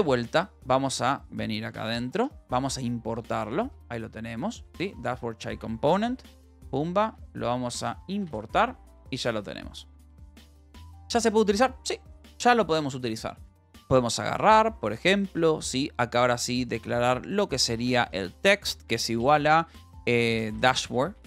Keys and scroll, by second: 0.0-2.1 typing, 4.1 ctrl+g, 4.6 BackSpace, 5.9 space, 6.0 c, 6.7 a, 6.9 Down, 7.8 Return, 8.8 ctrl+s, 8.9-10.7 typing.